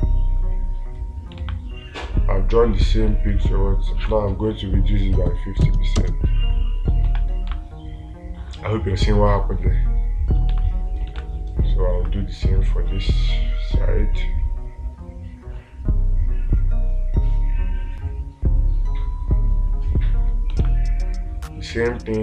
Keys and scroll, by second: 1.9 space, 8.0 space, 11.0 space, 11.7 space, 21.1 space.